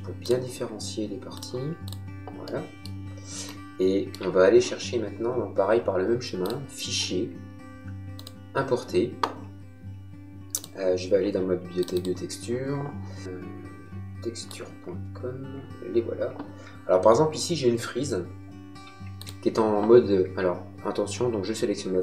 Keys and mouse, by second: 2.4 middle click, 6.4 click, 8.2 click, 10.5 click, 19.2 click.